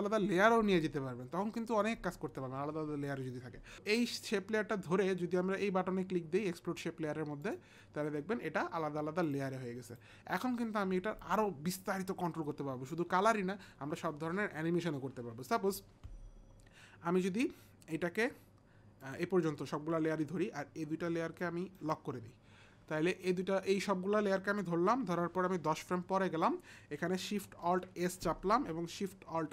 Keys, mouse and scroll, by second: 3.7 click, 7.5 click, 9.2 click, 9.9 click, 19.1 shift+click, 21.5 click, 25.7 shift+Page_Down, 27.6 alt+shift+s.